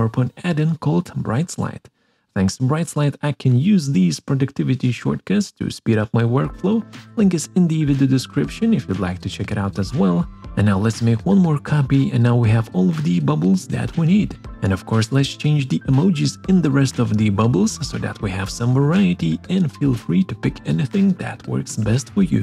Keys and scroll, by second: 0.3 ctrl+Right, 1.0 ctrl+Up, 12.0 ctrl+Right, 12.1 ctrl+Up, 14.4 BackSpace, 14.5 super+., 15.8 BackSpace, 16.0 super+., 17.5 BackSpace, 18.0 super+., 19.1 BackSpace, 19.3 super+., 20.8 BackSpace, 21.0 super+..